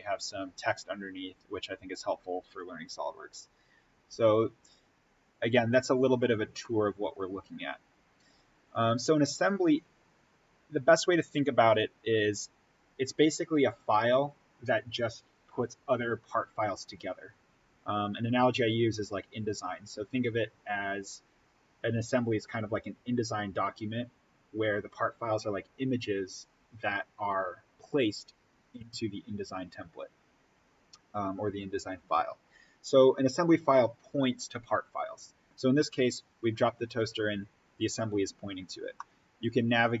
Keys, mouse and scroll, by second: 38.5-38.9 scroll up 1, 38.9-40.0 middle drag.